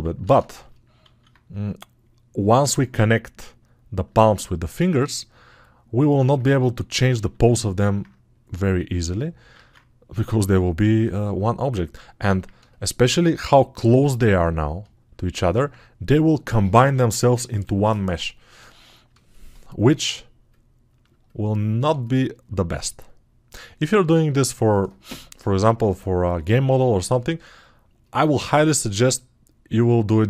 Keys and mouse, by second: 24.3-30.2 drag, 24.3-30.2 right drag.